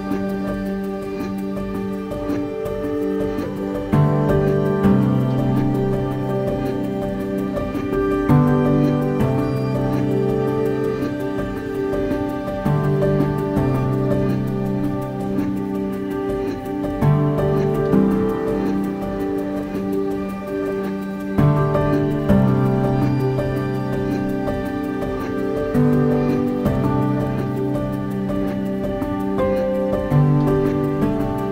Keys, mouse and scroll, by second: 0.0 Tab, 1.8 click, 3.7 Tab, 5.0 a, 7.3-9.1 right drag, 10.6-13.1 drag, 16.6 click, 18.0 Tab, 18.7 click, 21.0 scroll up 1, 21.7 click, 25.4-26.6 scroll down 1, 30.4 click.